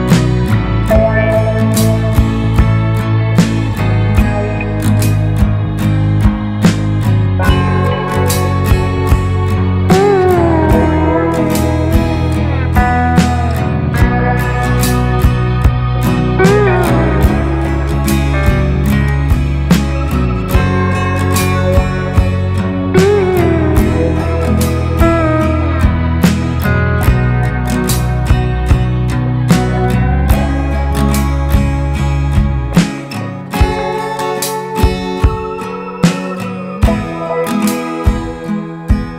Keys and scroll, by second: 1.7 Right, 1.8 Right, 2.0 Right, 2.2 Right, 2.4 Right, 4.0 Left, 4.1 Left, 4.3 Left, 4.5 Left, 4.6 Left, 8.1 Right, 8.4 Right, 8.5 Right, 8.7 Right, 8.9 Right, 10.0 Left, 10.2 Left, 10.3 Left, 10.5 Left, 10.6 Left, 12.1 ctrl+space, 14.5 Right, 14.6 Right, 14.7 Right, 14.9 Right, 15.0 Right, 16.5 Left, 16.5 Left, 16.7 Left, 16.7 Left, 16.8 Left, 16.9 Left, 17.0 Left, 18.5-19.2 Right, 20.2-21.0 Left, 22.0 Left, 22.0-23.1 Left, 24.1-24.6 Right, 26.9 Down, 27.0 Down, 27.0 Down, 27.1 Down, 27.6 Down, 29.0 Up, 29.0 Up, 29.1 Up, 29.2 Up, 29.3 Up, 29.4 Up, 29.5 Up, 30.7-31.1 Right, 31.3 Right, 31.5 typing, 32.4 Left, 32.7 Left, 32.9 Left, 33.0 Left, 33.0 Left, 33.1 Left, 34.3 Right, 34.5 Right, 34.6 Right, 34.7-35.1 typing, 36.1 Left, 36.2-36.5 typing, 37.7 Right, 37.8-38.2 typing, 38.5 Left.